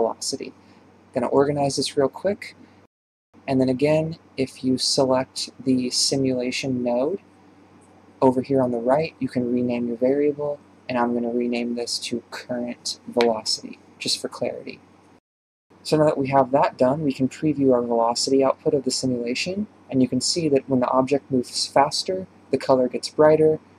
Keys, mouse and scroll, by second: 1.2 shift+Right, 1.3 g, 2.3 shift+Right, 2.4 g, 2.8 click, 3.4-6.3 drag, 6.4-11.7 drag, 12.8 click, 12.9-19.3 drag, 19.3 shift+space, 20.5 ctrl+shift+click, 20.6 ctrl+shift+click, 21.0 ctrl+shift+click.